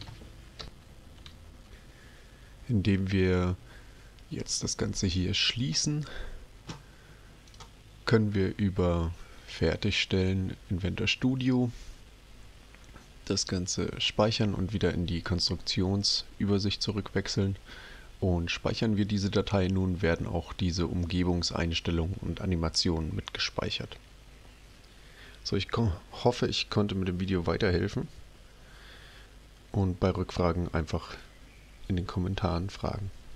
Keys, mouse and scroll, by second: 0.6 ctrl+alt+p, 5.4 click, 7.4 click, 9.3 click.